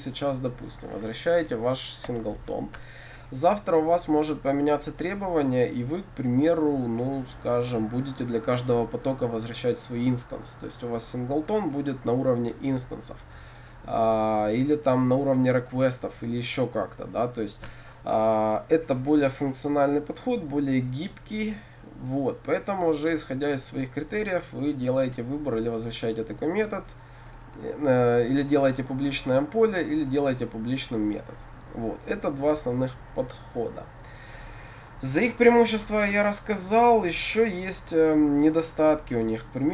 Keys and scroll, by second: 2.1 Return.